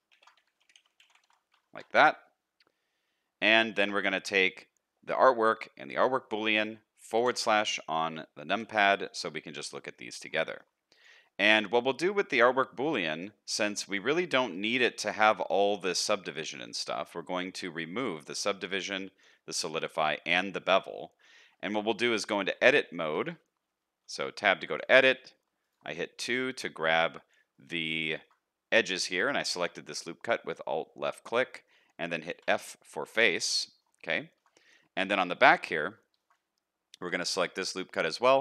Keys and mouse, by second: 0.3-3.4 drag, 0.7 o, 3.5 shift+middle drag, 7.1 KP_Divide, 8.2-8.7 middle drag, 8.6 alt+a, 8.9 middle drag, 9.8 middle click, 10.4 shift+middle click, 11.3 shift+middle drag, 11.6 middle drag, 14.5 middle click, 15.3 middle click, 20.9 middle click, 21.6 shift+middle click, 22.4 Tab, 22.8 shift+middle click, 23.3 middle click, 24.6 2, 26.0 middle click, 26.6 shift+middle click, 27.5 middle click, 28.1 shift+middle click, 28.9 middle click, 29.8 shift+middle click, 30.4 shift+middle click, 31.5 middle click, 32.3 f, 32.6-33.8 middle drag, 34.3 shift+middle click, 34.5 middle click, 35.2 shift+middle click, 35.9 shift+middle click, 37.3 shift+middle click, 37.6 middle click.